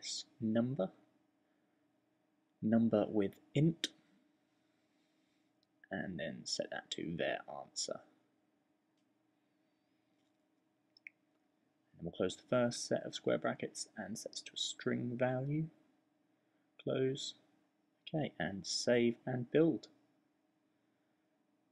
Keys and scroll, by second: 0.0-1.3 typing, 2.9-5.3 typing, 10.1-11.1 typing, 13.6-18.5 typing.